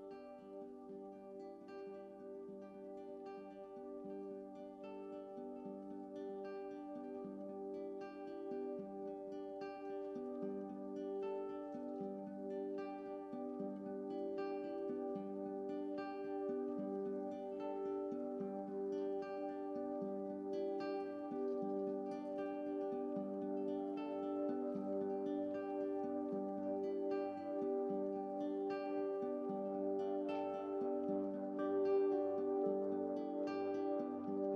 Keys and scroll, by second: 5.0 x, 5.9 x, 6.2 x, 7.1 x, 8.5 x, 11.5 x, 13.3 x, 30.5 ctrl+z, 30.7 ctrl+z, 31.0 ctrl+z.